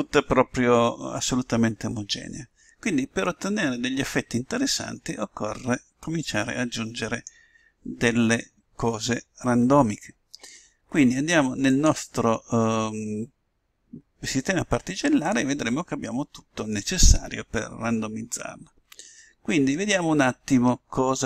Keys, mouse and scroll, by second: 4.3-5.9 middle drag, 12.6-14.1 drag, 16.1-17.7 drag.